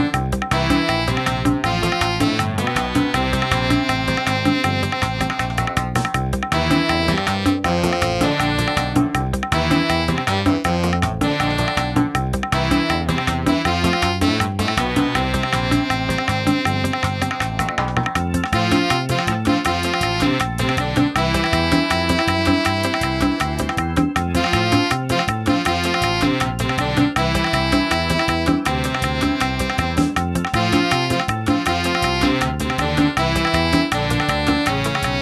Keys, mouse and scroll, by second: 22.3 n, 23.0 click, 24.0 shift+click, 25.2 shift+n, 27.3 click, 28.0 shift+middle click, 28.5 middle click.